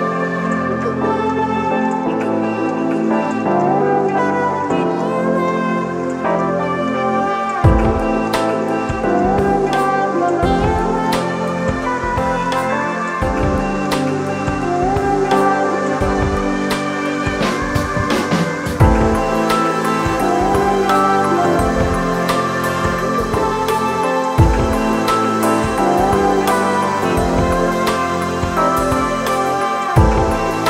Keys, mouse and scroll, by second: 12.3 ctrl+d, 28.3 Down.